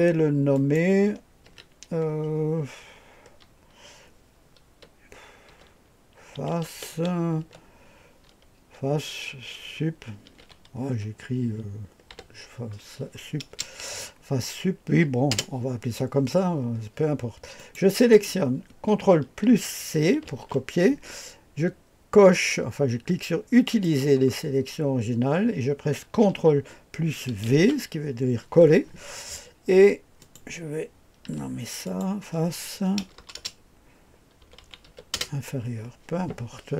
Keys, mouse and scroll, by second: 0.5 click, 1.5 F2, 5.5-7.9 typing, 10.0-12.1 typing, 13.5 typing, 15.3 Return, 17.6 click, 20.3 ctrl+c, 23.6 click, 24.8-26.2 scroll down 1, 27.4 ctrl+v, 30.2 click, 31.3 F2, 31.8 click, 33.0-35.3 typing.